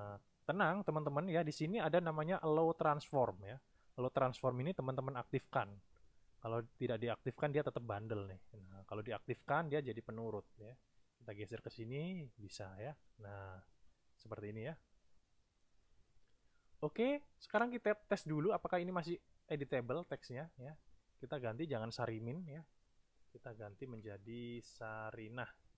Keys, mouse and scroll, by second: 5.2 click, 9.7 click, 10.8 click, 12.6 click, 13.7 click, 14.8 click, 18.5 click, 20.1 click, 22.5 Right, 23.8 Right, 24.2 BackSpace.